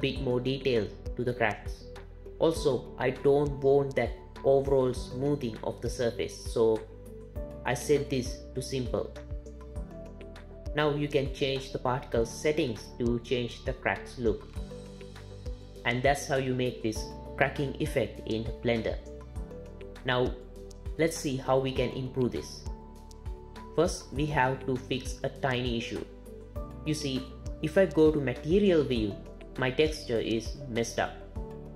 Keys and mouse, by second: 5.8 click, 10.6 click, 11.2-12.2 drag, 16.1-17.2 drag, 19.0 click, 26.9 z.